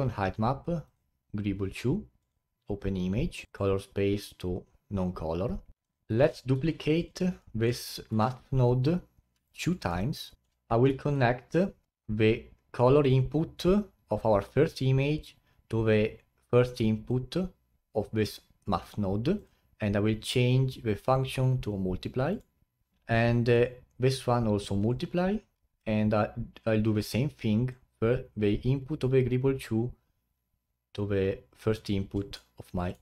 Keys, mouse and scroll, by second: 5.6 click, 5.7 middle click, 5.8 click, 6.5 shift+d, 7.4-8.1 middle drag, 8.1 shift+d, 9.9-11.0 middle drag, 11.0 ctrl+right click, 11.9-12.6 scroll up 3, 13.0-16.1 drag, 19.4-22.4 drag, 22.9 middle click, 23.5-28.8 drag, 32.3 middle click.